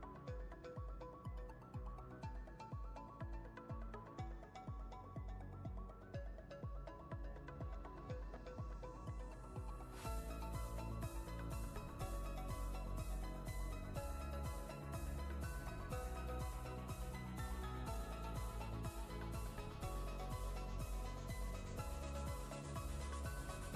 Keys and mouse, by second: 0.4-1.4 ctrl+click, 0.5 ctrl+space, 1.4-2.2 click, 2.2 space, 4.7 right click, 6.2-8.9 drag, 13.0-13.6 ctrl+drag, 16.6 click, 21.4 click.